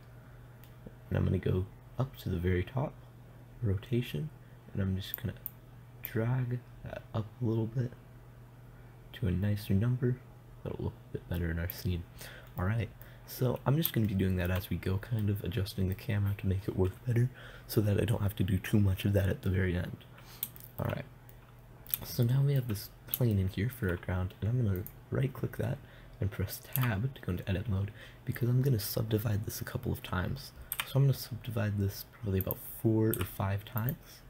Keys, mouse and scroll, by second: 0.2 n, 5.6-8.4 drag, 13.0 middle click, 25.2 right click, 26.1-27.2 middle drag, 27.3 Tab, 31.2 w, 33.6 w.